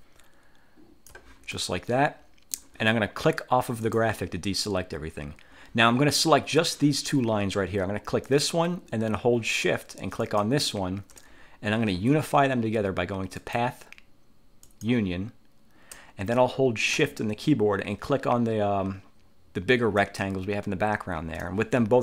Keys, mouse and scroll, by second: 1.6 ctrl+middle click, 2.0 click, 4.0 click, 8.4 click, 10.3 shift+click, 13.5 click, 14.8 click, 20.2 shift+click.